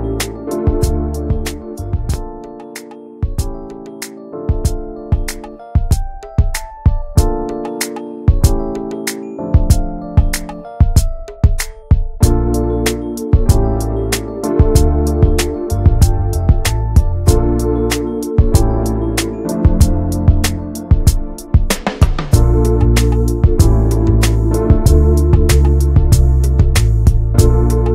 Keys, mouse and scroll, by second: 0.0 ctrl+s, 0.3-1.5 middle drag, 1.5 click, 1.9 middle click, 4.7-11.3 drag, 11.3 n, 18.8 shift+middle click, 19.6 n, 23.6-24.1 scroll up 2.